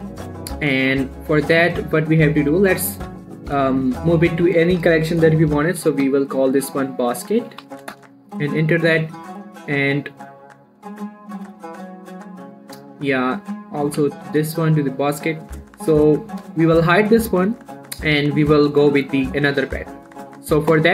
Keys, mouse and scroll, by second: 0.8 middle click, 1.2 shift+middle click, 1.8-3.4 drag, 3.4 m, 4.0 click, 6.1-7.9 typing, 8.1 Return, 9.8 click, 14.3 m, 15.2 click, 17.4-20.7 shift+drag.